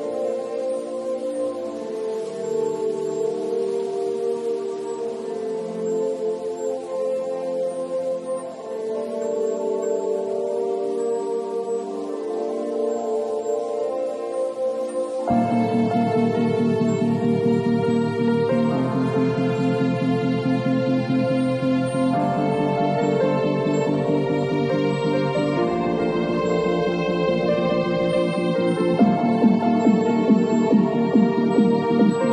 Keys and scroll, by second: 6.5 b, 29.2 v.